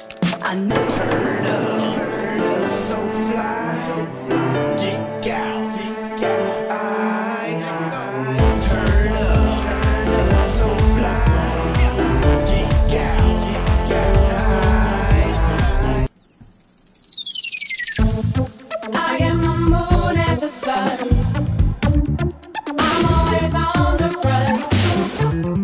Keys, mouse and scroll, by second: 0.7-2.0 middle drag, 0.7-1.3 scroll, 2.0 click, 2.5 scroll down 6, 2.7-9.6 drag, 11.5-17.5 drag, 17.9 drag, 18.3-25.4 drag, 25.4-25.6 scroll down 10.